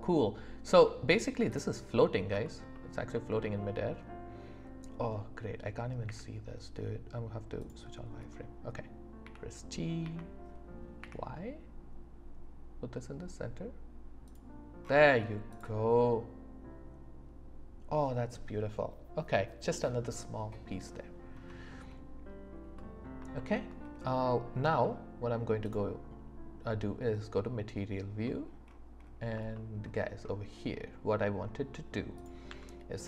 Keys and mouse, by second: 0.1 middle click, 6.1 q, 9.2 g, 10.0 x, 11.0 y, 14.3 click, 15.5 middle click, 16.0-18.4 middle drag, 22.8 middle click, 23.4 shift+middle click, 24.7 z, 28.3 click, 28.3 middle click, 28.3 right click, 29.5 shift+middle click, 32.2 click, 32.5 Tab.